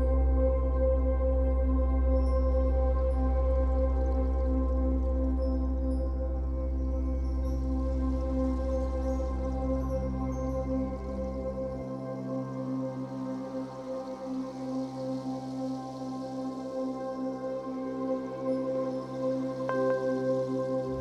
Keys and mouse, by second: 0.9 click, 1.7 click, 3.0 Right, 3.1 Right, 4.4 i, 5.5 click, 6.6 click, 7.6 0, 7.9 Return, 8.7-10.2 typing, 11.5 click, 12.5-16.0 typing, 12.9 click, 13.3 click, 16.2 ctrl+alt+click, 17.1 ctrl+alt+click, 17.5 ctrl+alt+shift+click, 18.1 ctrl+alt+click, 18.1 typing, 18.6 alt+shift+click, 19.1-20.2 drag.